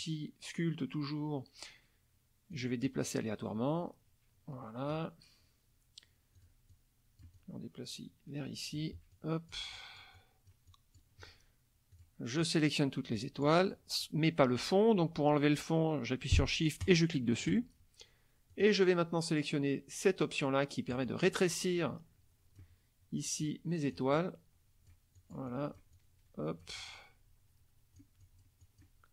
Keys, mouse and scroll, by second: 2.5-5.1 drag, 6.4 click, 6.7-8.9 drag, 9.1 click, 11.9 click, 12.4-13.6 drag, 16.8 shift+click, 18.5 click, 20.9-22.8 drag, 23.4 click, 25.2-28.2 drag.